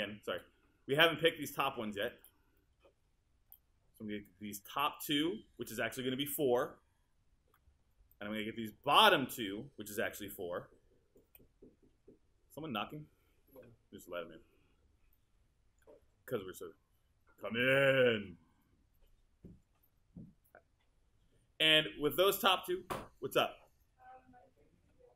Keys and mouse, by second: 15.2 alt+click.